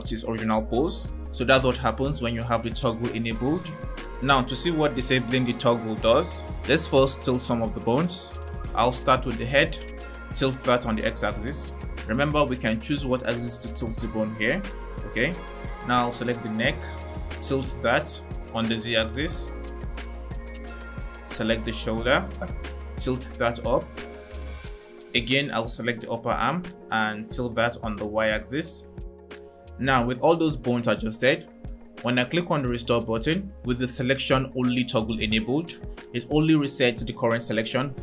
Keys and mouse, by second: 8.0-8.7 drag, 10.0 click, 12.0 click, 15.5-17.3 drag, 18.3 click, 18.9 click, 20.2 click, 21.1-21.9 drag, 24.6 click, 25.2-26.4 drag, 27.3 click, 28.8 click, 36.0 click.